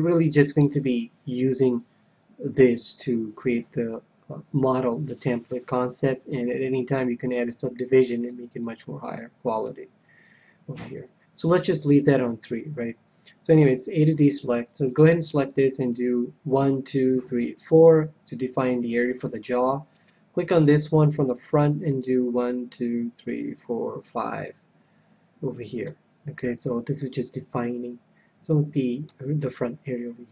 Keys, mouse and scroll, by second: 0.5-2.6 middle drag, 2.9 KP_3, 6.8-8.8 drag, 8.2-9.8 middle drag, 9.9 middle click, 12.2 KP_3, 13.5 a, 14.0-16.5 middle drag, 14.7-16.7 right drag, 15.8-17.6 drag, 19.9-21.8 right drag, 20.7 KP_1, 21.9-23.7 drag, 26.6-28.6 middle drag, 29.3 KP_3, 29.8-30.3 scroll down 1.